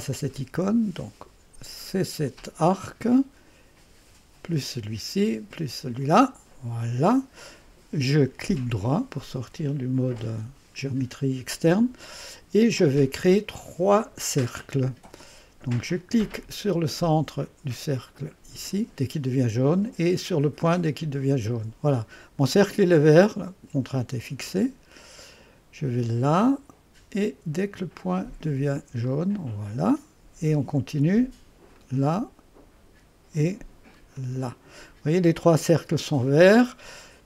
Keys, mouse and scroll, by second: 0.0 click, 2.3 click, 4.4 click, 6.0 click, 8.5 right click, 14.0 click, 18.7 click, 21.0 click, 26.2 click, 29.0 click, 31.8 click, 34.2 click.